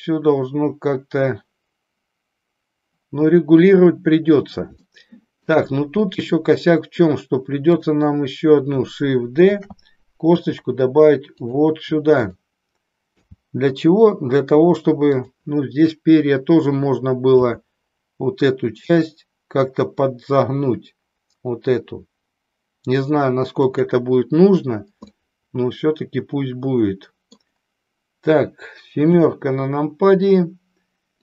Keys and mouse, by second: 4.9 shift+middle click, 9.5 shift+d, 11.5 click, 13.3 g, 17.4 g, 23.8 click, 25.1-27.5 middle drag, 29.1 KP_7.